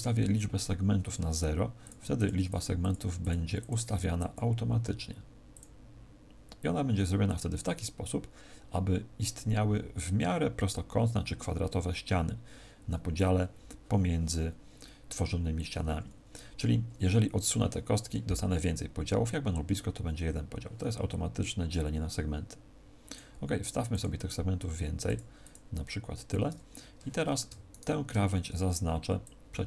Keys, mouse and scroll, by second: 1.8 click, 2.1 click, 23.0 click, 23.5 click, 26.9 a, 27.6 alt+shift+right click, 29.2 click.